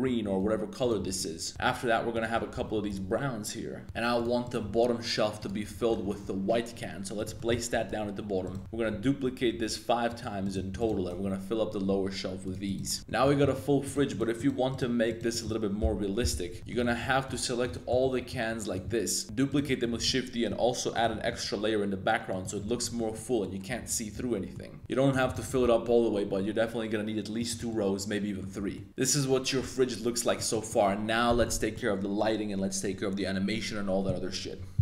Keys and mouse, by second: 0.4-4.7 typing, 0.8 right click, 4.4 click, 5.7 shift+click, 6.0 g, 6.2 z, 7.1 click, 7.3 shift+click, 7.7 g, 7.9 x, 8.4 right click, 8.6 g, 8.9 x, 10.1 click, 10.4 right click, 10.7 shift+d, 10.9 g, 11.1 x, 12.4 click, 12.7 drag, 13.0 a, 13.4 middle click, 13.8 right click, 14.1 shift+right drag, 14.3 shift+right click, 14.7 shift+right drag, 15.1 shift+right click, 15.3 shift+middle click, 15.8 KP_1, 16.2 KP_3, 16.5 z, 16.6 shift+drag, 16.9 b, 17.7 shift+drag, 18.0 b, 18.9-19.2 middle drag, 19.2-21.3 typing, 19.6 middle click, 22.3 click, 22.5 middle drag, 22.8 z, 22.9 middle click, 23.4-24.5 middle drag, 24.8 y, 25.1 click, 25.3 shift+d, 25.4 g, 25.6 y, 27.4 click, 27.7-28.4 middle drag, 28.5 a, 28.7-30.3 middle drag, 28.9 super+s, 30.5 middle click, 31.4-34.2 middle drag.